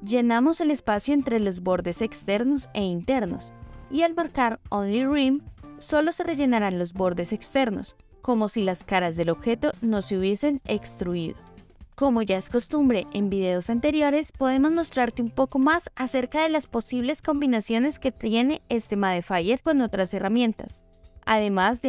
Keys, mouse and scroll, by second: 0.9 middle click, 2.6 click, 3.4 middle click, 5.3 click, 5.9-8.6 middle drag, 9.8 click, 13.4 click, 14.1 click, 14.7 click, 16.0 click, 18.3 click, 19.3 click, 21.7-21.8 middle drag.